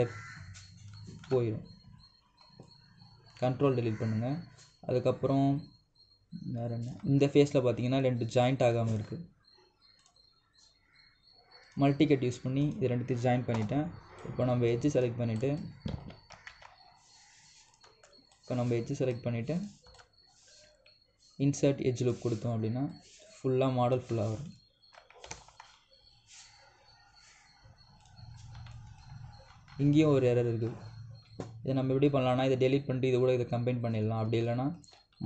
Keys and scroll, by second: 2.0 ctrl+Delete, 14.3 Return, 16.6 Escape, 17.2 ctrl+z.